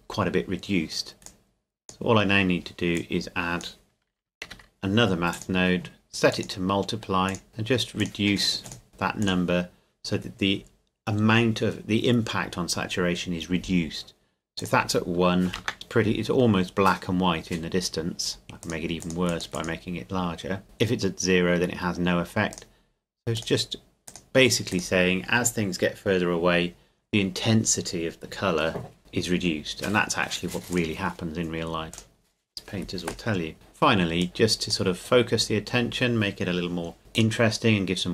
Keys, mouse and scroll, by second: 1.3 click, 4.5 shift+d, 5.3 click, 14.6 click, 15.5 KP_1, 15.6 KP_Enter, 16.5 scroll up 1, 18.6 click, 20.6 KP_Enter, 22.5 click, 30.7 click, 33.5 middle click, 34.2 click, 35.2-37.0 scroll down 1, 37.1 click.